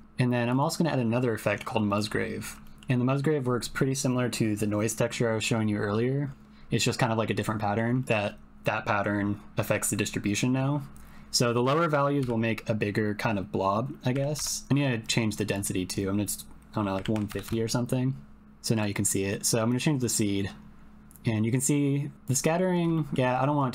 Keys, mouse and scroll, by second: 0.5-1.9 drag, 2.6 shift+middle click, 7.6 middle click, 7.9 ctrl+middle click, 8.0-14.4 drag, 15.1-17.8 drag, 19.7-22.3 drag, 22.9 shift+click.